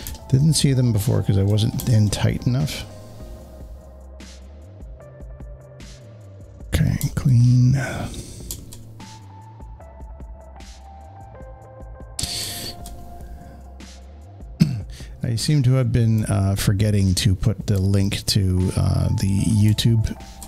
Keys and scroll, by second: 0.1 space.